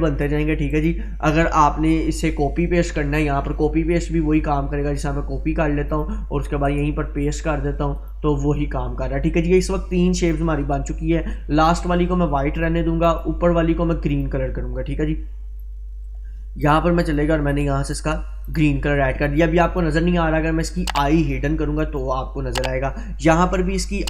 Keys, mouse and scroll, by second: 0.8 right click, 5.9 click, 6.7 right click, 8.0 click, 13.1-16.8 drag, 20.8 click.